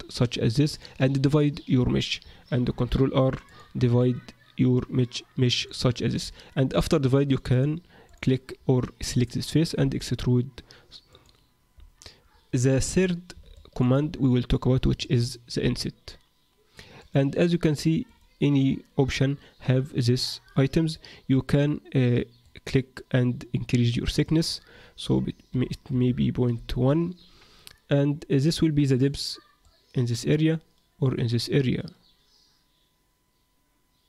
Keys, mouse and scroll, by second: 2.6 ctrl+r, 7.5 click, 8.1 click, 9.8 e, 13.5 shift+middle click, 14.1-14.7 scroll up 1, 15.0 shift+middle click, 15.0-15.6 scroll up 2, 15.6 i, 18.6 click, 22.4 click, 24.5 click, 28.5 click, 28.9 click, 29.0 click, 29.6 click.